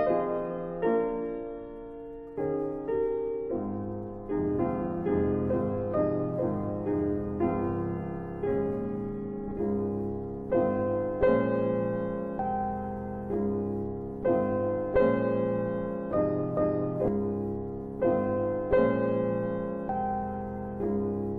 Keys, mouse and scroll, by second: 1.2 click, 2.9 Delete, 3.5 click, 4.5 Delete, 5.7 click, 5.9 Delete, 6.5 Delete, 8.0 Delete, 8.5 Delete, 9.3 scroll down 1, 12.7 scroll up 1, 13.2 click, 13.7 middle click, 13.7 scroll down 1, 14.4 click, 15.3 typing, 16.2 click, 17.7 click, 19.8 scroll down 2, 20.4 middle click, 20.5 scroll up 1, 21.2 middle click.